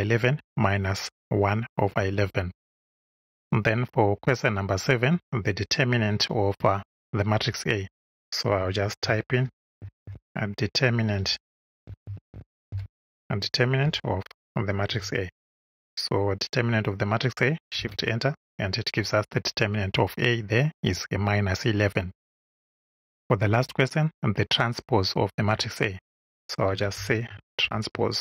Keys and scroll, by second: 8.3-13.8 typing, 14.8 shift+a, 17.7 shift+Return, 26.4-28.2 typing.